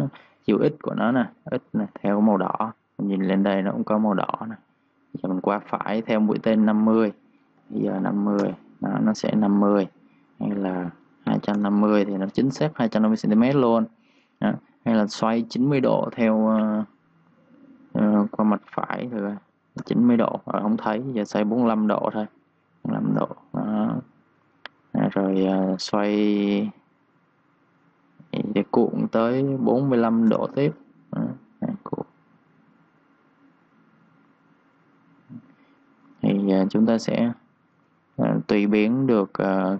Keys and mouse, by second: 6.9 click, 7.5 Home, 7.9 5, 8.1 Return, 10.5 click, 11.1 2, 11.3 Return, 13.3 click, 18.9-19.2 typing, 19.8 Return, 20.9 ctrl+z, 21.9 click, 22.3-23.2 typing, 24.4 click, 29.4-30.4 typing, 32.1 click.